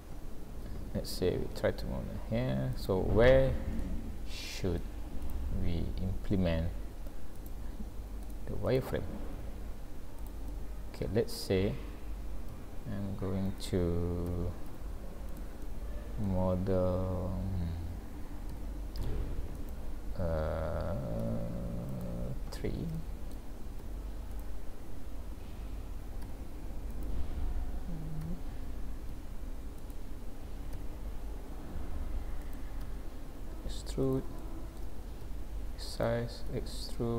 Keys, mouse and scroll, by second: 0.7 a, 1.6 s, 3.1-3.7 scroll up 5, 3.8 middle click, 5.3 click, 7.4 click, 8.2 click, 8.7 click, 9.4 s, 10.5 middle click, 11.4 click, 12.5 g, 14.3 g, 15.7 middle click, 18.5 g, 21.3 e, 23.0 shift+middle click, 23.8 s, 25.5 g, 28.2 r, 30.7 g, 32.8 e, 34.4 shift+middle click, 35.3 s, 36.5 e.